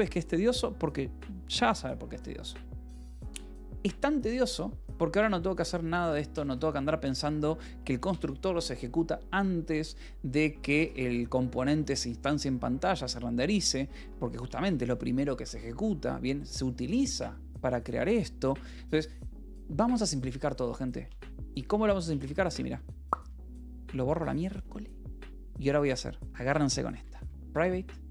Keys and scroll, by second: 3.4-7.8 typing, 8.4 Escape, 9.8 k, 10.5 j, 10.9 Escape, 13.8 j, 14.6 j, 15.3 Escape, 21.6 Escape, 21.6-24.5 typing, 26.4-28.1 typing.